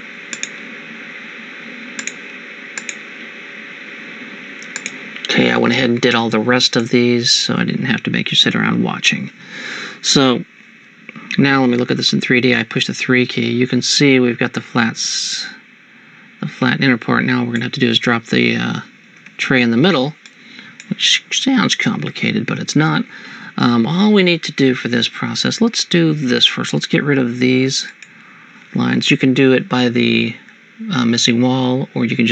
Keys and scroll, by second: 12.1 3, 19.4 Escape.